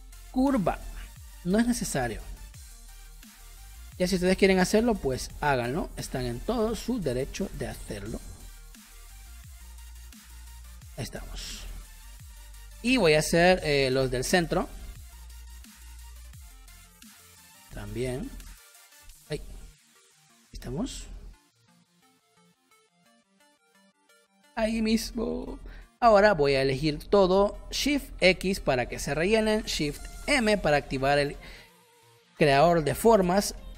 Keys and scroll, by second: 3.4 space, 6.6 a, 12.0 v, 12.3 space, 13.6 p, 19.3 ctrl+z, 19.8 space, 25.4 v, 28.2 shift+x, 30.2 shift+m, 31.8 space.